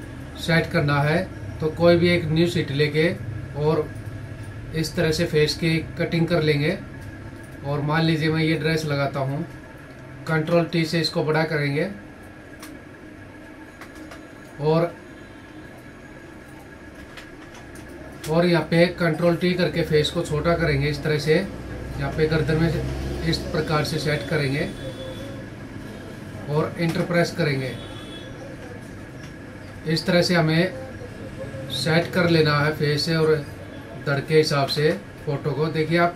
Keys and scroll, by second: 10.3 ctrl+t, 17.1 ctrl+=, 17.7 space, 19.1 ctrl+t, 22.2 ctrl+=, 27.3 ctrl+-, 29.5 Up, 31.9 ctrl+t.